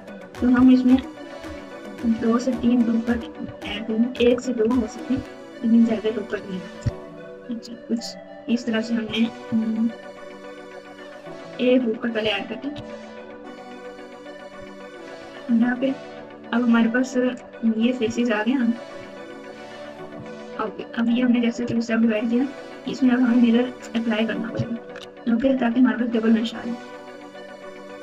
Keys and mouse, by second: 0.5 KP_Add, 1.3 KP_Subtract, 3.4 ctrl+KP_2, 4.2 KP_Add, 5.1 ctrl+KP_2, 6.2 ctrl+r, 12.7 ctrl+r, 18.0 4, 18.9 3, 19.1 click, 20.2 shift+click, 21.1 click, 21.6 Tab, 22.0 Tab, 23.0 Tab, 24.7 ctrl+a, 25.6 Tab, 27.2 click.